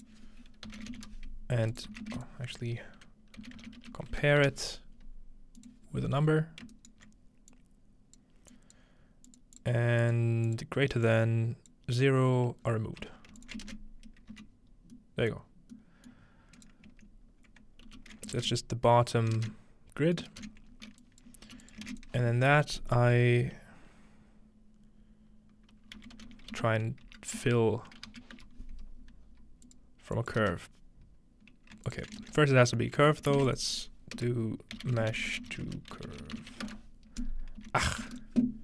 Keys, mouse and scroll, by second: 0.0-2.1 typing, 2.8 shift+click, 3.4-4.9 typing, 5.6 click, 5.9-7.1 scroll up 2, 6.8 alt+right drag, 7.5 click, 8.5 click, 9.3 click, 9.6 click, 10.5 click, 11.1-12.6 drag, 12.6-12.9 scroll down 1, 13.4 alt+shift+click, 13.7 ctrl+shift+space, 14.3 ctrl+alt+shift+z, 15.4-16.2 scroll down 1, 16.2-17.9 scroll up 1, 17.9 alt+g, 18.4 ctrl+space, 19.4 ctrl+space, 19.6 typing, 20.2-21.6 ctrl+middle drag, 20.7-21.6 scroll up 1, 21.0 ctrl+click, 21.2-22.0 typing, 21.7 click, 22.0 shift+click, 26.0-27.8 typing, 28.2 Down, 29.6 click, 30.2 click, 30.4 ctrl+space, 31.9 alt+shift+click, 32.2 ctrl+shift+space, 33.0 g, 33.2 click, 33.4 shift+a, 33.5 click, 34.2 Return, 34.8-36.5 typing, 37.2-38.6 drag, 37.6-38.6 typing.